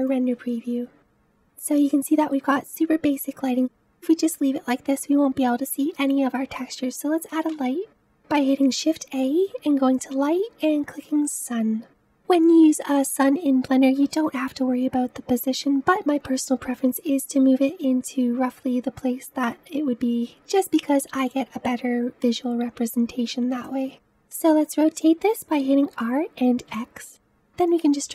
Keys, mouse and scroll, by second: 2.0 scroll up 1, 3.5-6.0 middle drag, 6.0-6.7 scroll down 1, 11.1 shift+a, 14.0 g, 20.2-23.6 middle drag, 23.6 click, 25.8 r.